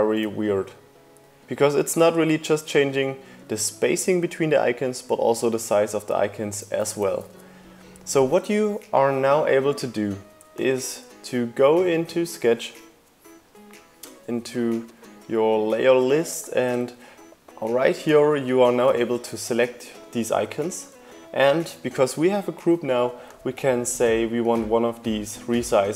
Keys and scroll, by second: 7.7 super+z.